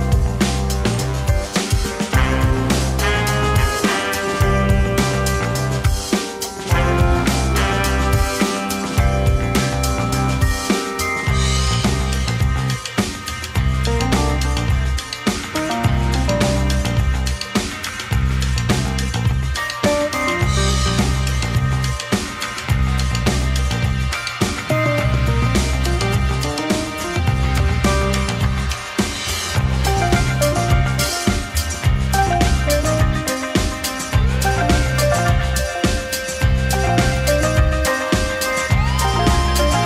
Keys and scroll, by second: 0.8 Delete, 15.3 Delete, 17.4 Delete, 23.9 Delete, 24.7 Delete, 25.1 Delete.